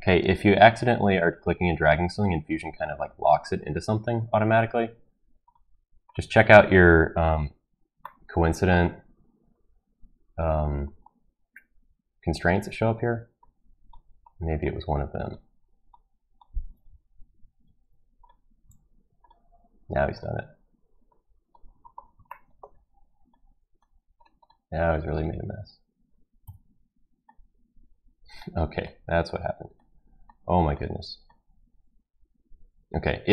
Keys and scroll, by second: 0.7 ctrl+z, 12.5 Delete, 17.3 ctrl+z, 17.7 ctrl+z, 18.7 ctrl+z, 26.4 Delete.